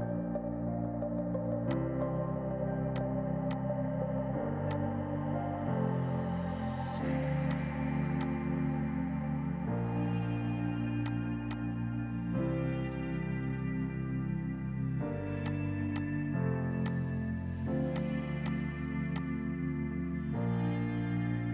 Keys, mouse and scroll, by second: 1.6 click, 5.3 Delete, 7.4 click, 8.1 click, 9.3 right click, 11.0 click, 15.4 click, 16.8 ctrl+click, 17.7-18.7 typing, 17.9 click, 19.1 shift+click.